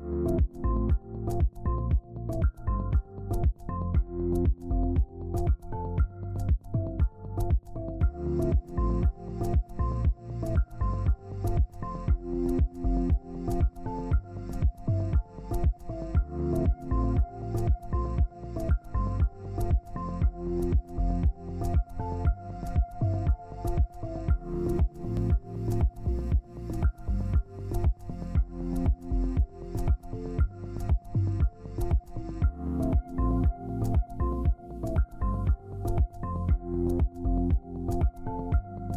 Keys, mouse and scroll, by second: 6.3 double click, 16.4 double click, 21.2 typing, 22.7 ctrl+space, 24.4-25.0 scroll down 1, 25.5 ctrl+space, 26.1 double click, 27.8 ctrl+z, 28.3 shift+click, 33.4 Down, 33.6 Down, 33.8 Down, 33.9 Down, 34.3 Down, 34.8 Up, 35.6 Up, 36.3 Down, 36.8 Down, 37.0 Left.